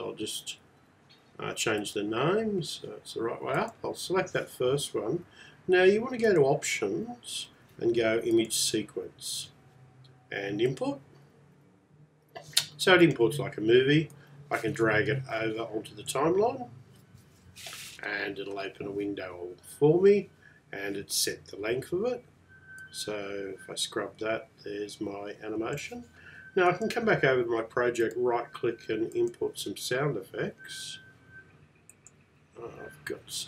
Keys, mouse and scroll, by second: 14.6 click, 26.8 click, 28.1 right click, 29.2 click.